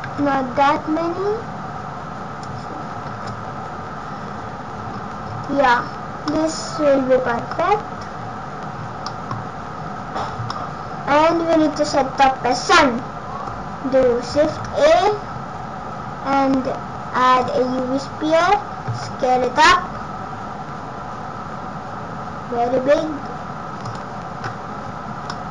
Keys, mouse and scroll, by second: 0.1 ctrl+z, 3.1 shift+r, 4.9-5.3 scroll down 4, 5.2-6.3 scroll up 13, 6.3 middle click, 7.5 scroll down 1, 8.2 scroll down 4, 9.1 middle click, 11.2 scroll down 5, 14.4 shift+a, 18.9 s, 25.2 middle click.